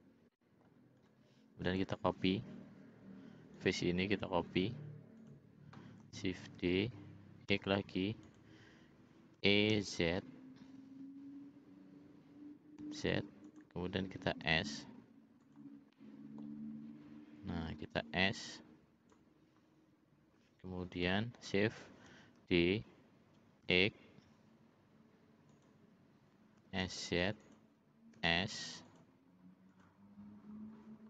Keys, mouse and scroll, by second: 0.3 middle click, 0.9 click, 1.6 click, 5.3 click, 6.6 shift+d, 9.4 e, 14.4 s, 15.9 middle click, 18.0-19.2 drag, 21.0 l, 22.4 shift+d, 26.6 s, 28.1 s, 29.7 click.